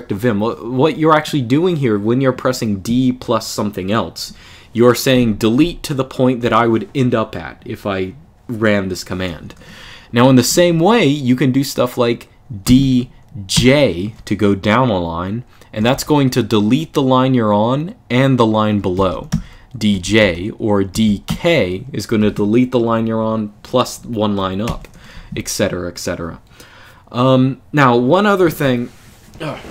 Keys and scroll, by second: 10.0 k, 10.2 k, 10.4 k, 12.4 d, 13.3 j, 15.6 Escape, 15.8 u, 18.7-21.0 typing, 19.7 Escape, 24.4 u.